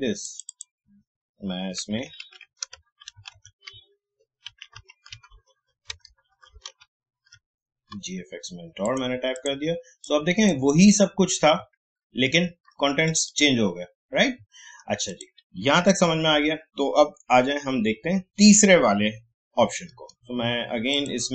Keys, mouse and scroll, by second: 2.2 ctrl+a, 3.0 shift+g, 5.9 shift+BackSpace, 6.3 shift+t, 8.8 click, 11.7 alt+scroll down 1, 12.3-12.7 alt+scroll up 1, 13.1 click, 14.4 alt+scroll down 1, 15.1 click, 19.9 right click, 20.9-21.3 drag.